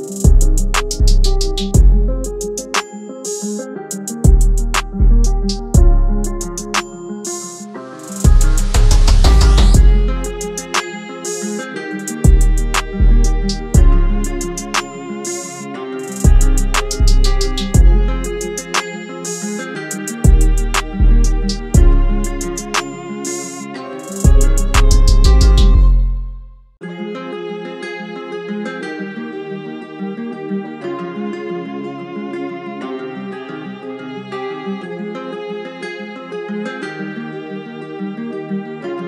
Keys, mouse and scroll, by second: 1.1 ctrl+-, 2.4 alt+shift+click, 4.7 Return, 11.0-12.0 typing, 12.5 double click, 15.1-15.7 typing, 38.8 double click.